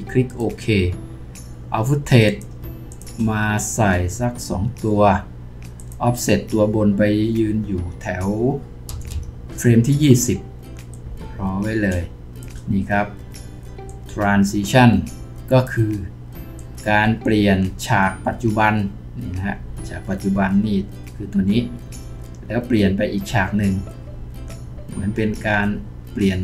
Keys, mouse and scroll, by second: 2.9 shift+click, 8.9 shift+Page_Down.